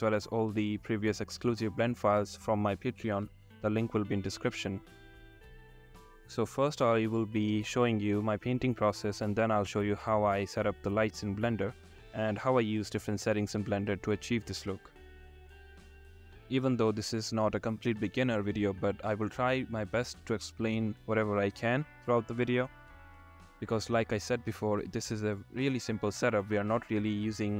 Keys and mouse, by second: 5.9 click, 6.5-8.8 drag, 10.0 r, 10.3 z, 14.7 click, 18.4-19.0 drag, 19.0 r, 19.3 y, 21.8 click, 24.5-27.5 drag.